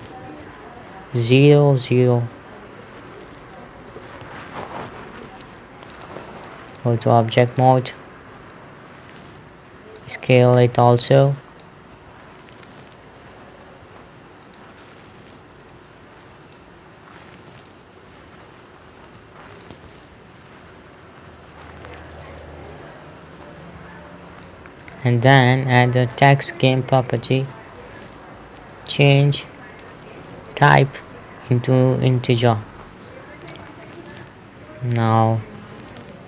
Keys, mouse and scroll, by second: 0.3 BackSpace, 1.7 KP_0, 4.4 Return, 5.6 BackSpace, 6.4 click, 10.9 s, 11.7 click, 12.4 s, 14.9 click, 20.3 s, 22.0 click, 27.6 click, 30.2 click, 32.9 click.